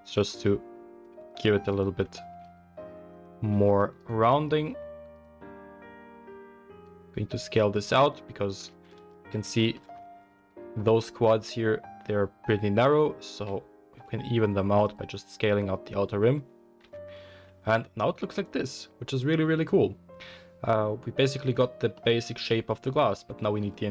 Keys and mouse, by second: 1.3 alt+click, 1.7 alt+click, 2.8 alt+shift+click, 3.9 alt+shift+drag, 5.1 alt+shift+click, 5.6 s, 8.9 ctrl+z, 9.4 shift+middle click, 13.3 s, 14.6-23.9 middle drag, 16.8 Tab.